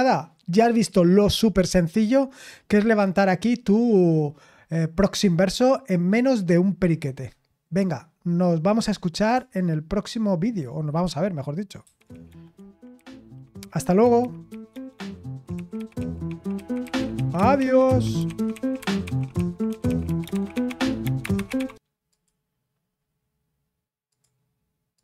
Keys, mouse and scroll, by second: 11.8 super+x, 22.1 click, 24.1 click, 24.9 click.